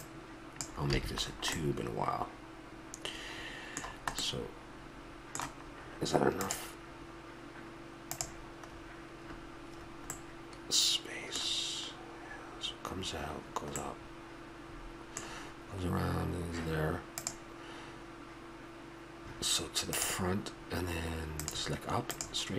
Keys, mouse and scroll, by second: 0.9 a, 1.2 middle click, 1.4 middle click, 2.6 middle click, 3.4 middle click, 4.2-6.5 middle drag, 8.7-17.3 middle drag, 21.4 click.